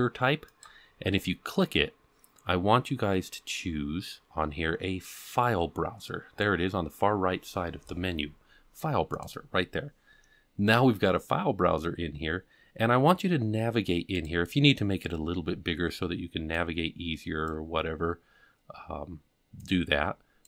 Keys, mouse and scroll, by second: 0.5-10.0 drag, 14.1 click, 16.5 click, 19.7 click.